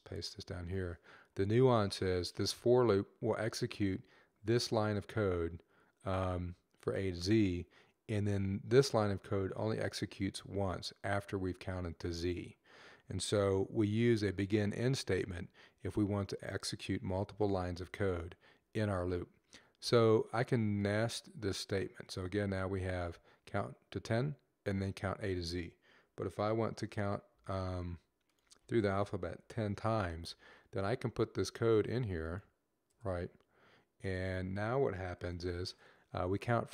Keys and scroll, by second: 27.2 ctrl+x.